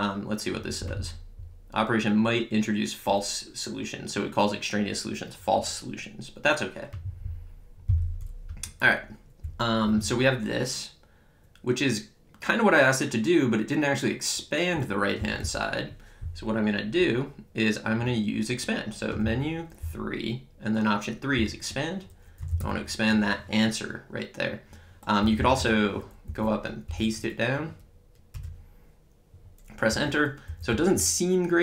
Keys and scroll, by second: 8.5 Up, 9.5 Left, 10.0 Right, 15.2 Down, 19.2 Menu, 19.9 3, 22.2-23.1 typing, 25.2 BackSpace, 26.3 Up, 26.9 Return, 29.9 Up, 30.5 Left, 30.7 Right.